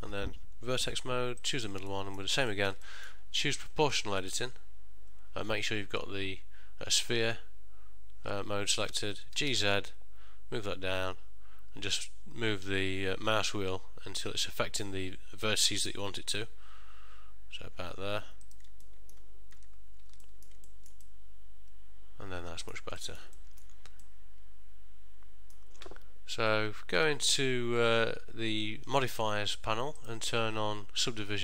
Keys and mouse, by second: 0.9 1, 1.6 click, 2.0 middle click, 2.6 ctrl+middle click, 3.0 shift+middle click, 4.3 click, 8.9 middle click, 9.5 g, 19.0 middle click, 19.7 Tab, 20.3 ctrl+middle click, 20.8 shift+middle click, 21.2 middle click, 23.1 ctrl+middle click, 23.4 shift+middle click, 24.1 middle click, 30.1 click.